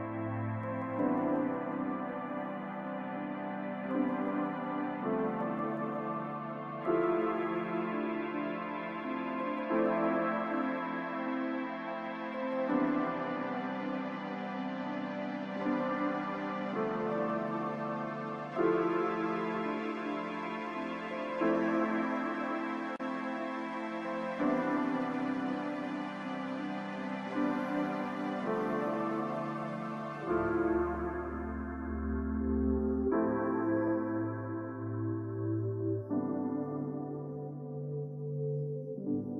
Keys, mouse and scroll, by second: 0.4 ctrl+click, 26.4-26.7 scroll down 1.